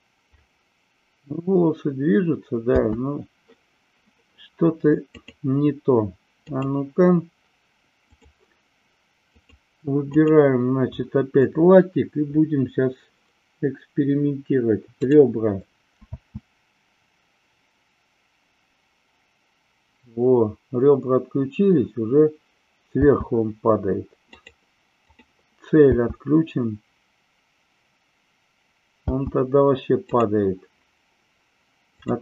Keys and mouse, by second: 2.6 space, 5.1-6.6 drag, 8.0 click, 9.3 click, 10.1 click, 15.0 click, 16.0 space, 23.0 space, 25.1 click, 29.1 space, 30.1 click.